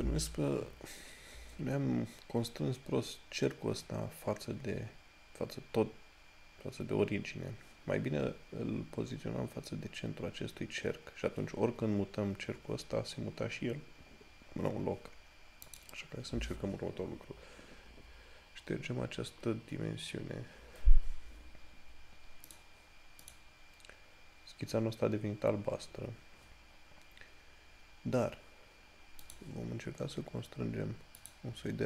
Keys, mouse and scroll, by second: 1.3 scroll, 1.6 scroll up 1, 4.8 scroll down 1, 8.3 scroll up 1, 14.6 scroll down 1, 16.5 click, 21.9 scroll up 1, 22.7 click, 25.6 scroll up 1, 29.6 click.